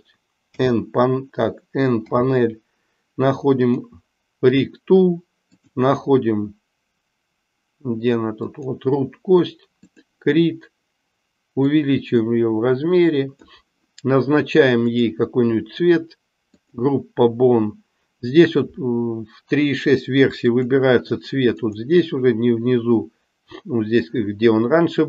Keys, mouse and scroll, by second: 0.5 n, 3.6 click, 5.5-8.7 drag, 9.8 click, 11.6-13.6 drag, 16.5 click, 20.6-21.8 drag.